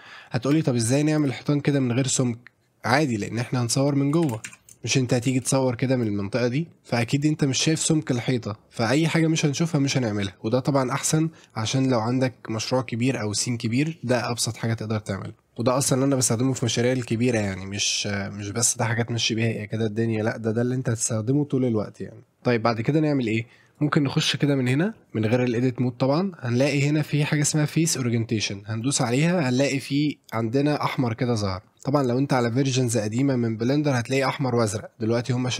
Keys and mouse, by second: 0.5 click, 0.8 middle drag, 3.6 middle drag, 4.2 shift+f, 4.5 Tab, 4.6 middle click, 4.9 shift+middle drag, 5.2 middle click, 5.7-6.0 shift+middle drag, 6.2 middle click, 10.5-11.2 middle drag, 13.7 middle drag, 14.1-15.4 middle drag, 15.6-16.0 middle drag, 23.7-29.6 drag, 29.8-30.5 middle drag, 30.7-31.6 middle drag.